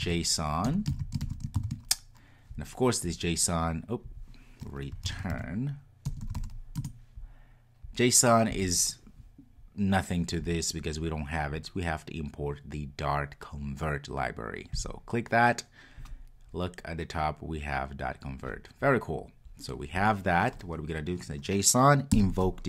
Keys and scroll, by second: 6.8 Return.